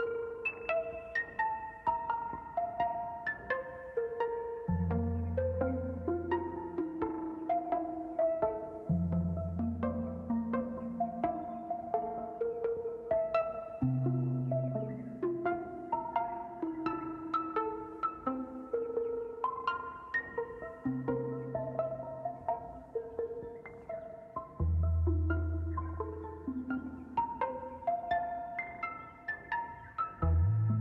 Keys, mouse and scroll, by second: 1.4 KP_0, 1.9 scroll down 9, 7.1-8.2 drag, 8.2 middle click, 8.8-10.5 drag, 10.5-11.2 scroll up 15, 11.2 scroll down 3, 11.4 middle click, 12.4 KP_Decimal, 12.8 scroll down 4, 13.1 middle click, 13.8 scroll down 1, 14.0 middle click, 14.5-14.9 scroll down 2, 14.9-16.0 middle drag, 16.0-16.5 scroll down 3, 16.5-18.6 middle drag, 17.4 click, 18.2-18.8 scroll down 5, 19.2 KP_0, 19.6-20.0 scroll down 10, 20.5 scroll up 1, 23.9 shift+middle click, 24.5-25.4 scroll down 1, 25.4 scroll down 1, 25.6-26.2 scroll up 1, 26.2-27.3 scroll down 1, 27.3-27.8 scroll down 1, 30.4 ctrl+s.